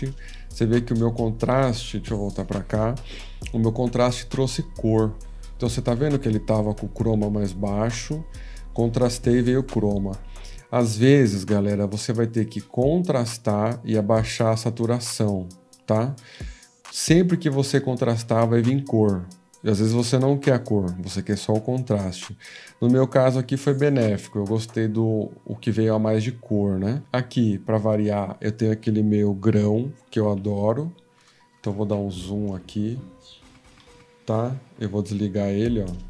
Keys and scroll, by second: 2.6 F13, 30.3 ctrl+=, 30.8 ctrl+=.